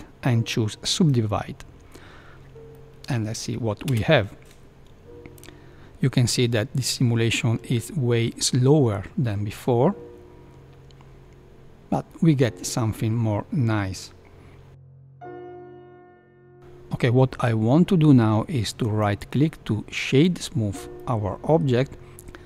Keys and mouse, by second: 2.3 Tab, 2.3 Left, 2.7-3.3 middle drag, 3.8 space, 14.9 KP_1, 16.6 space, 18.8-20.2 right drag, 20.9-21.6 middle drag.